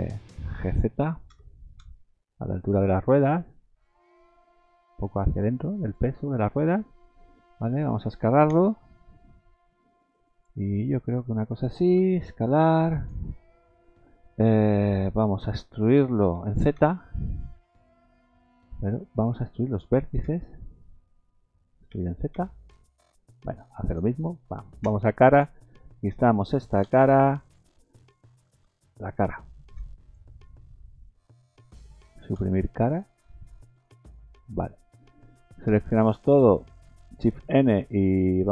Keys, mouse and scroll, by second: 1.3 g, 6.3-8.3 scroll down 11, 6.7 middle click, 7.6 middle click, 8.5 s, 11.2-11.9 scroll down 7, 11.9 s, 16.4 e, 19.0 ctrl+z, 20.2 1, 21.9 e, 24.8 3, 25.3 click, 26.8 Delete, 28.5 ctrl+z, 29.7 3, 30.0 click, 32.3 Delete, 34.1 middle click, 35.7 a.